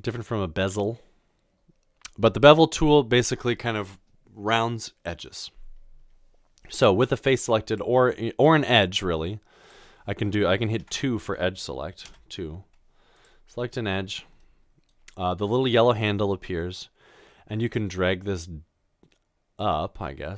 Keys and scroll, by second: 10.9 typing, 12.0 typing.